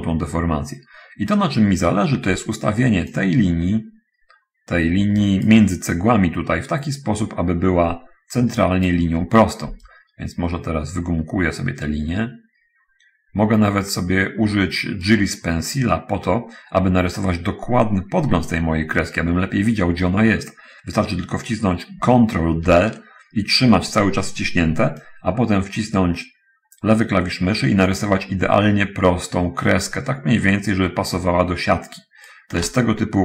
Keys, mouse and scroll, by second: 2.3 d, 2.9 d, 3.5-6.0 drag, 7.4-9.4 drag, 9.9-15.6 right drag, 23.0 ctrl+d, 25.3-32.8 ctrl+drag.